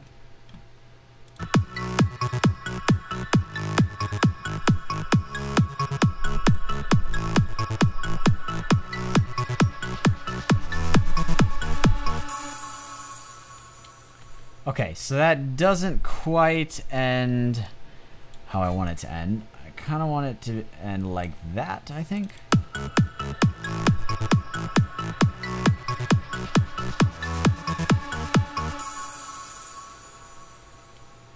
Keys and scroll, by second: 14.1 space.